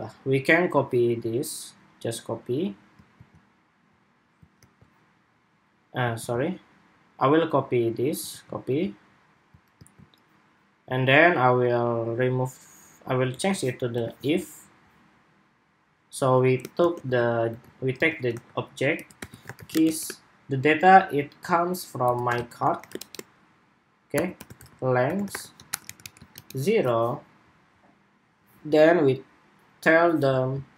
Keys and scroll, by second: 2.8 super+c, 4.4 super+v, 5.9 super+z, 8.0 super+c, 9.5 super+v.